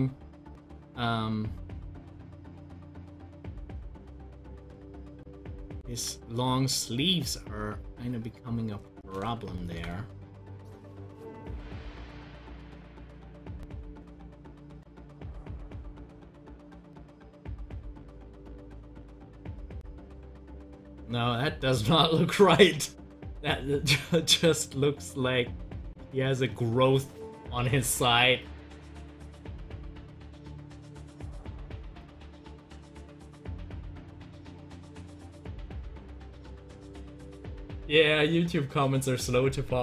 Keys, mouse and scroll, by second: 6.4-9.3 drag, 9.3 ctrl+z, 36.0 click, 37.5 click.